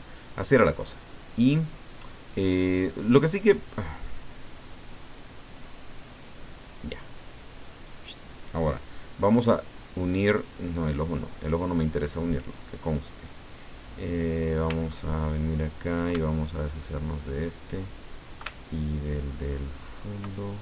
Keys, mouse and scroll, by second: 0.3 click, 1.3 click, 2.3 click, 6.0-8.0 drag, 10.4 click, 10.9-13.4 drag, 14.8-15.4 ctrl+scroll up 4, 16.5 ctrl+shift+click, 19.0 ctrl+shift+click, 19.6 ctrl+shift+click, 20.4 ctrl+shift+click.